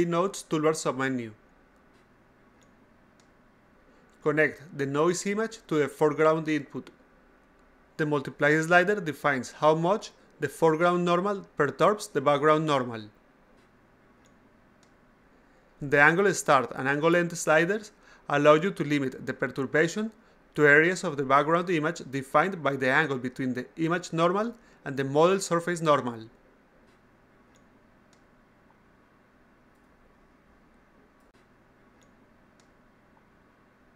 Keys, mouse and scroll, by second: 0.6 click, 2.0-3.7 drag, 3.8 click, 5.2 click, 6.7 click, 8.9-14.2 drag, 15.4-19.5 drag, 20.7-28.8 drag, 30.5-33.9 drag.